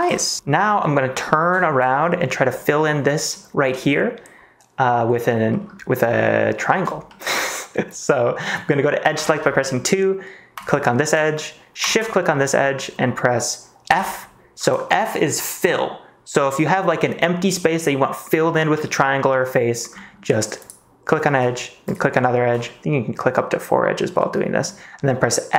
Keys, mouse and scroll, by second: 0.7 middle click, 1.1 middle click, 1.5 shift+middle click, 2.2 middle click, 3.2 middle click, 5.4 middle click, 6.5 middle click, 7.0 shift+middle click, 9.1 2, 9.7 middle click, 11.8 shift+click, 12.2 middle click, 13.8 f, 16.4 middle click, 18.4 middle click, 19.3 middle click, 19.9 middle click, 20.5 click, 24.1 middle click.